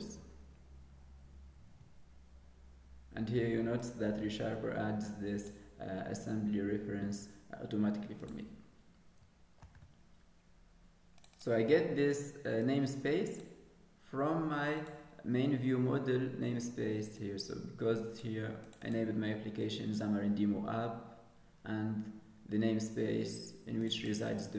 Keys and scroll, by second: 9.7 ctrl+s.